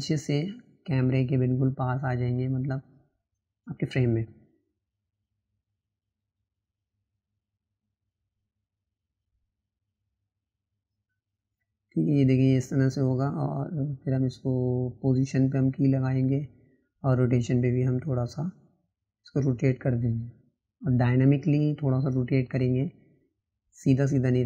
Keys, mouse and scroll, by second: 12.1-15.3 drag, 15.3-16.6 right drag, 16.6-17.9 drag, 19.3 click, 20.1 click, 22.4 click, 23.1-24.2 middle drag, 24.2 click.